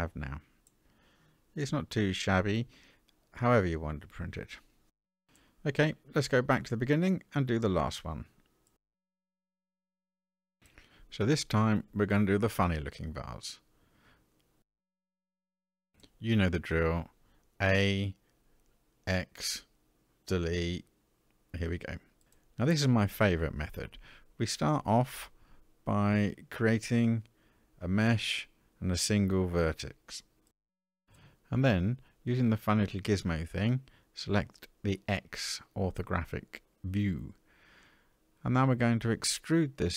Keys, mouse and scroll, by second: 19.1 a, 19.3 x, 26.2-30.0 drag, 33.5 click, 36.0-37.0 shift+middle drag, 39.9 e.